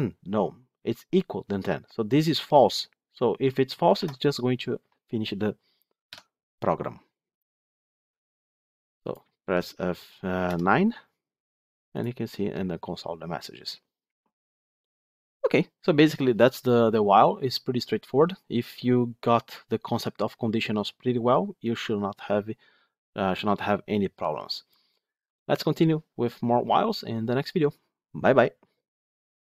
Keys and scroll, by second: 3.9 F8, 8.0 F8, 10.4 F9.